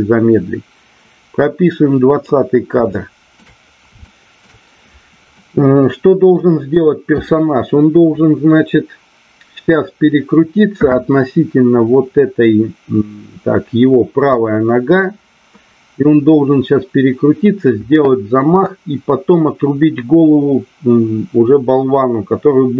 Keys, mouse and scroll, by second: 2.8-3.4 shift+middle drag, 4.0-4.4 shift+middle drag, 5.4-6.3 middle drag, 6.8-7.3 middle drag.